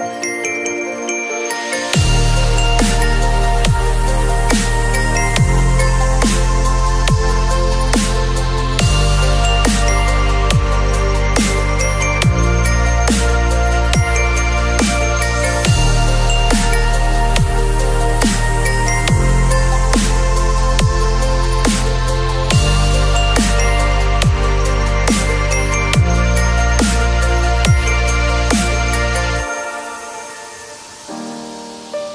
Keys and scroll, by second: 14.6 space, 23.6 b, 24.8 x, 27.1 x, 28.4 v, 30.6 b, 31.0 x.